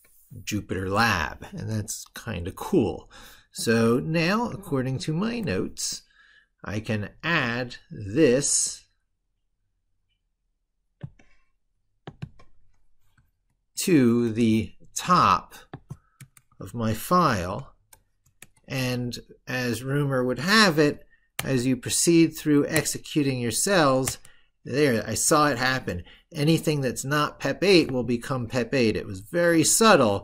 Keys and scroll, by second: 4.2 ctrl+super+Left, 13.3 ctrl+super+Right, 17.3 ctrl+v.